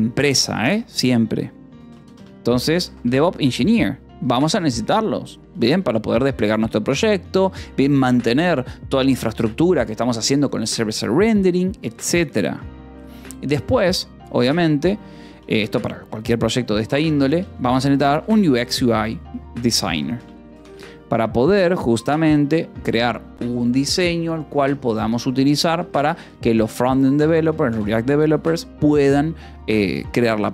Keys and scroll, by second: 1.7-3.3 typing, 5.0 ctrl+s, 6.1 ctrl+s, 12.2 :, 12.3 space, 14.9 shift+u, 16.0 shift+x, 17.3 BackSpace, 17.6 /, 18.3 space, 19.4-22.0 typing, 22.6 ctrl+s, 25.7 k, 26.8 j, 27.3 Escape, 28.0 Escape, 28.2 j, 28.8 j.